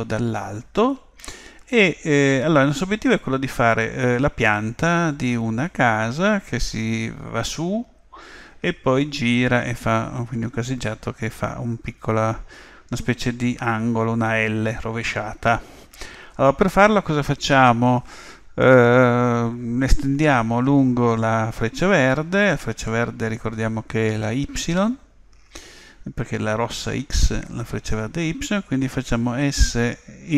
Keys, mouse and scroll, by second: 29.4 s.